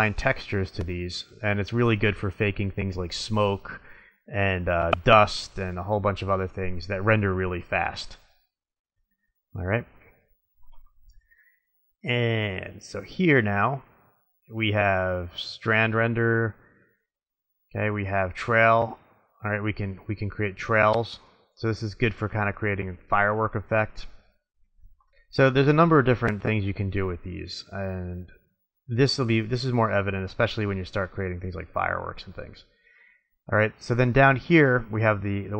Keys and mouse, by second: 3.5-5.4 middle drag, 9.6 click, 11.1-12.7 middle drag, 15.4 click, 20.4-22.1 middle drag, 25.1-26.0 drag, 26.0 middle drag, 33.1-33.6 middle drag, 35.1 middle click.